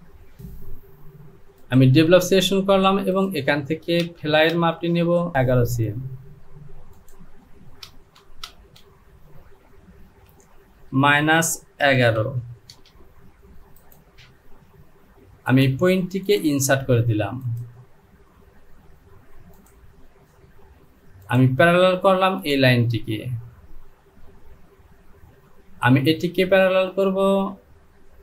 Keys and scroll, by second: 4.1 space, 5.3 ctrl+z, 8.0 space, 8.5 space, 10.3 Down, 10.9 KP_Subtract, 11.8 KP_1, 12.0 KP_1, 12.8 Return.